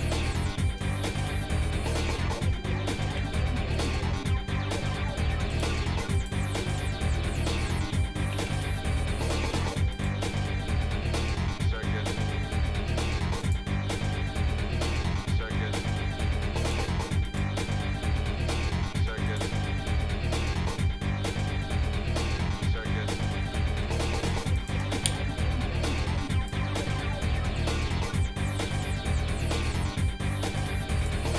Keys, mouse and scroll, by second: 1.0-2.5 shift+middle drag, 3.2 ctrl+s, 3.8 click, 4.5-4.9 scroll down 2, 5.0 middle click, 5.5 shift+click, 6.2 shift+click, 8.3 ctrl+a, 11.5 shift+middle click, 12.0 middle click, 12.5 shift+middle click, 13.4 click, 15.0 shift+middle click, 15.3 middle click, 16.2 scroll up 2, 16.6 click, 17.4 click, 18.0 shift+middle click, 18.7 shift+middle click, 19.3 click, 19.7 shift+middle click, 20.6 middle click, 21.2 scroll up 1, 23.4 g, 26.3-27.6 drag, 28.2 middle click, 31.0-31.3 drag.